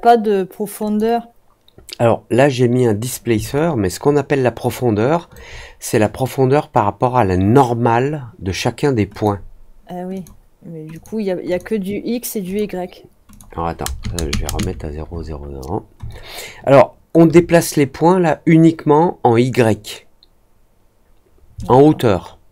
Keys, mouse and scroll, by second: 0.8 click, 3.5-5.3 alt+drag, 9.0 click, 10.1 click, 10.9 click, 11.4 click, 12.4 click, 13.2 click, 16.0-17.0 alt+drag, 21.6-22.5 alt+drag.